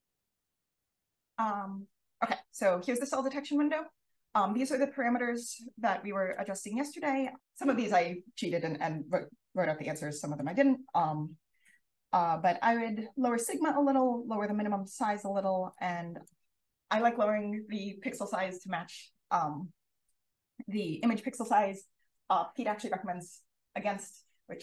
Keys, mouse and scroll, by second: 7.2 click, 10.0 click, 14.9 5, 15.6 click.